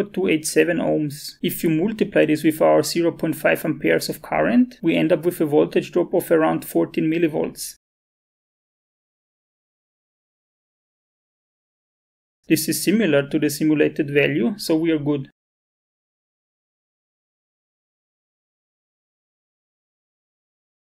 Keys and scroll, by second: 1.9 ctrl+c, 2.3-7.6 typing, 3.3 Up, 3.4 Down, 8.1 Return, 10.4-11.8 typing.